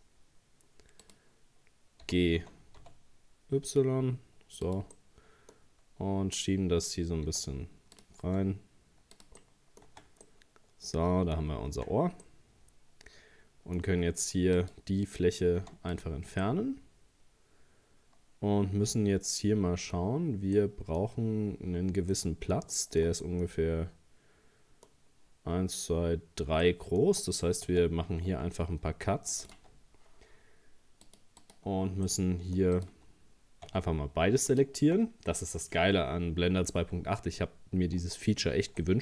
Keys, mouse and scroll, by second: 2.1 g, 5.0-7.3 middle drag, 7.3 e, 8.3 s, 9.4 middle click, 9.9 Tab, 10.3-11.8 middle drag, 11.8 Tab, 12.3-14.6 middle drag, 14.6 right click, 15.6 x, 16.4-19.5 middle drag, 20.0-20.6 scroll up 2, 20.6 middle click, 21.4 scroll down 2, 22.1-24.9 middle drag, 24.9 scroll up 2, 26.6 middle click, 27.1 Tab, 27.7 Tab, 28.5 ctrl+r, 29.5 ctrl+r, 31.1-32.1 drag, 32.1 middle click, 32.8 right click, 33.7 Tab, 34.5 shift+right click, 38.0 Tab, 38.8-39.0 middle drag.